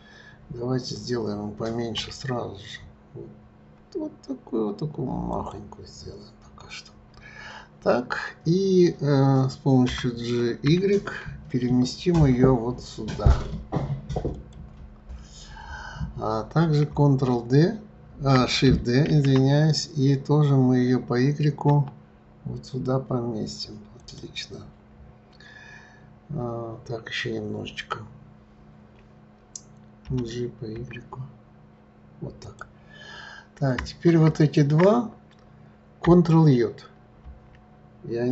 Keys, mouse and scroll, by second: 2.0 s, 5.8-7.7 scroll up 7, 9.8 g, 19.1 shift+d, 24.6-26.7 scroll up 5, 26.7-28.1 scroll up 3, 30.0 g, 34.4 shift+click, 37.1 ctrl+j.